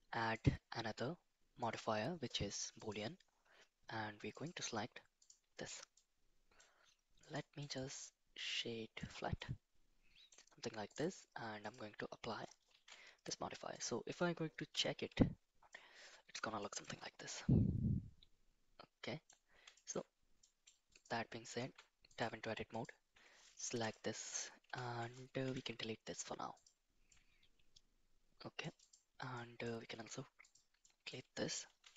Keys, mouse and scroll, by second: 0.4-2.9 drag, 4.4 click, 5.9-6.6 middle drag, 7.2 click, 7.6-9.1 right drag, 9.4-10.3 middle drag, 10.9 click, 11.6 click, 12.7 ctrl+a, 14.7 /, 15.7-16.3 middle drag, 16.6 shift+middle drag, 17.3-19.3 middle drag, 19.7 shift+middle drag, 20.4 middle drag, 20.9 click, 21.6 Tab, 22.0 click, 22.7 click, 23.7 3, 23.8 click, 24.6 ctrl+KP_Add, 25.4 x, 27.1-28.6 middle drag, 28.8 click, 29.3 middle click, 29.9 x, 30.8 middle click, 31.8 2.